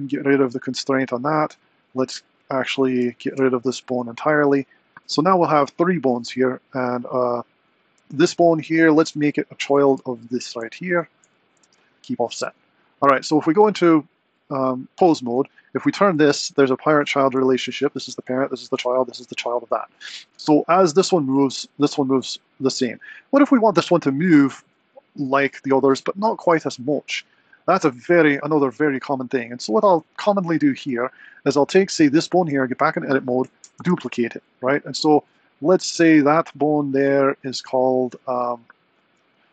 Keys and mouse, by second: 0.2-1.4 drag, 2.9 Tab, 3.3 x, 7.0 click, 10.9 super+p, 13.2 Tab, 13.7 click, 15.3 r, 20.6 r, 24.9 r, 30.2 click, 32.2 Tab, 33.6 shift+d, 38.3-39.5 middle drag.